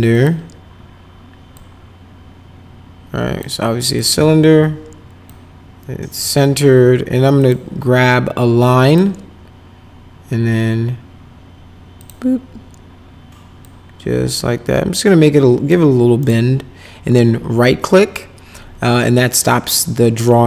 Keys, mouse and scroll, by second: 0.1 click, 1.5-3.4 drag, 3.9 click, 4.4 w, 5.2 click, 7.4 click, 8.9 click, 12.0 click, 13.6-15.7 drag, 16.2 right click, 19.7 middle click.